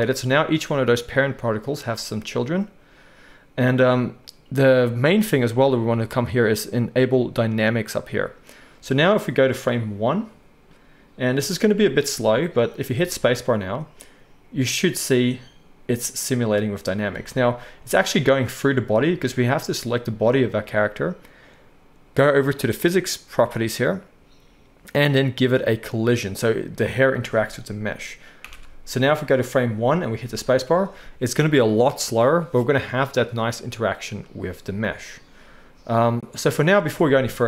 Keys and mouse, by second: 8.0-22.7 drag, 13.0 space, 17.2 space, 22.7-25.7 middle drag, 25.7-37.4 drag, 28.5 shift+Left, 30.2 space, 37.1 space.